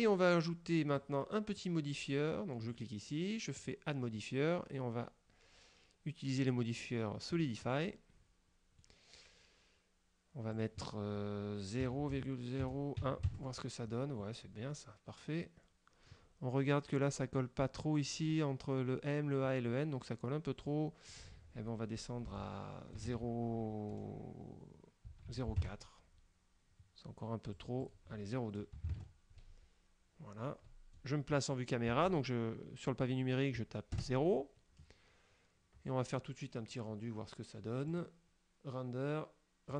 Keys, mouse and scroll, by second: 1.1 click, 2.8 click, 3.7 click, 7.4 click, 8.0-9.1 middle drag, 10.6 click, 11.9 KP_Decimal, 12.2 KP_0, 13.1 KP_1, 13.4 KP_Enter, 14.8-16.4 middle drag, 17.9 scroll up 1, 20.7 click, 21.2 click, 22.4 BackSpace, 23.1 KP_2, 25.1 BackSpace, 25.4 KP_4, 25.6 KP_Enter, 27.6 click, 28.9 BackSpace, 29.0 KP_2, 29.6 KP_Enter, 34.0 KP_0, 38.0 click.